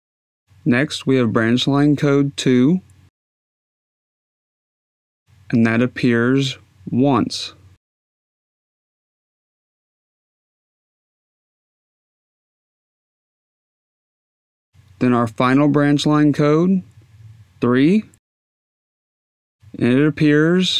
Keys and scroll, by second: 4.1 2, 12.4 Tab, 13.1 1, 14.1 Tab, 17.5 3.